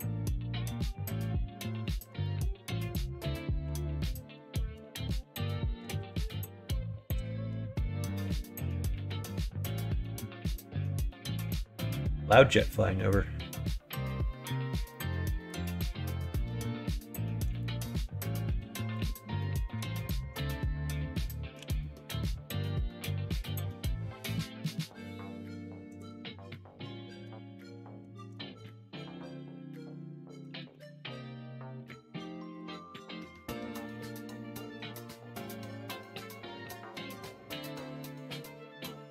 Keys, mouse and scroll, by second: 0.0 e, 2.1 ctrl+z, 2.7 r, 5.8 KP_1, 5.9 KP_3, 7.5 g, 14.9 middle click, 16.2 s, 17.8 middle click, 18.5 KP_1, 18.8 KP_3, 21.6 g, 27.6 shift+middle click, 29.2-30.5 middle drag, 30.7 ctrl+r, 32.8 middle click, 34.0 middle click, 34.7-35.7 middle drag, 35.9 3, 37.1 x.